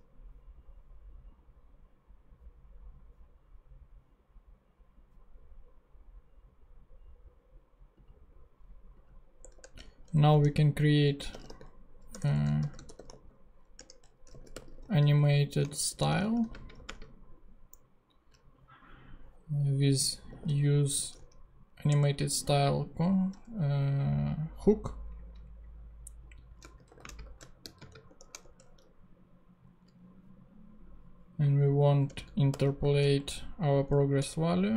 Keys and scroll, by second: 9.4 Return, 10.3-17.2 typing, 13.7 Return, 20.0-21.7 typing, 21.8 shift+Return, 26.5-28.5 typing, 32.1 Return, 32.2-33.1 typing, 34.3 Return.